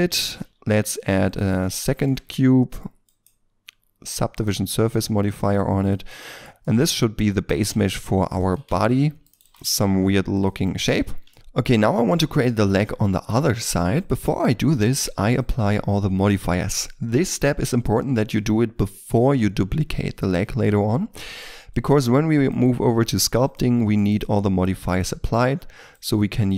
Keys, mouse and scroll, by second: 0.3 shift+a, 1.5-1.8 scroll down 1, 1.8 shift+middle click, 5.4 double click, 6.1 middle click, 6.6 shift+middle click, 7.7 ctrl+r, 7.9 ctrl+click, 8.5 a, 8.6 c, 9.2 right click, 9.4 ctrl+click, 9.5 right click, 9.7 right click, 9.7 s, 10.6 middle click, 10.8 Tab, 11.3 shift+middle click, 11.8 middle click, 13.5-13.9 scroll up 1, 13.9 right click, 22.5 right click.